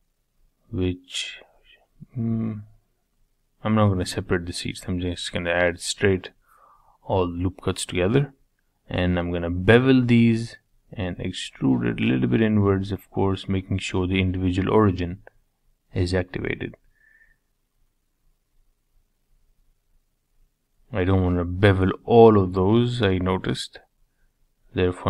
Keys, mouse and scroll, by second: 0.7 ctrl+z, 2.3 ctrl+r, 7.1 ctrl+b, 9.9 e, 12.3-14.0 middle drag, 14.0 ctrl+z, 14.8 ctrl+z, 17.1 click, 18.3 shift+click, 18.7 shift+click, 19.2 shift+click, 19.5 shift+click, 19.8 shift+click, 20.3 shift+click, 21.5 shift+click, 21.9 shift+click, 22.5 scroll up 3, 22.8 shift+middle click, 23.6 shift+click, 24.1 shift+click, 24.7 shift+click.